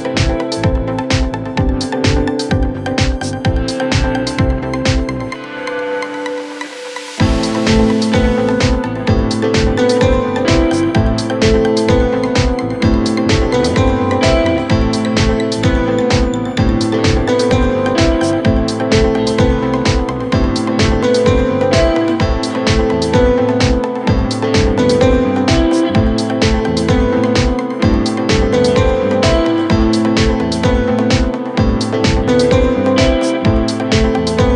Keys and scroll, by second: 10.5 z, 10.8 Escape, 11.0 ctrl+z, 30.8 f.